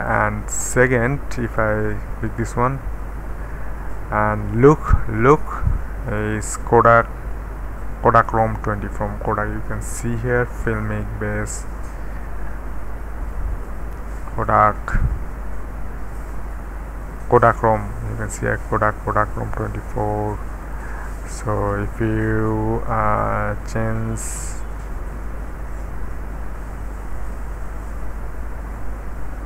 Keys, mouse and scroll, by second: 1.5 click, 2.4 click, 4.6 click, 6.1 click, 8.2 click, 8.9 click, 9.2-9.5 scroll down 1, 9.5-11.0 scroll up 1, 11.7-14.8 scroll down 2, 14.8-15.8 scroll down 1, 15.8-17.5 scroll down 2, 20.8 click, 21.2-21.5 drag, 24.6 Down, 25.6 Down, 26.5 Down, 27.4 Down, 28.7 Up.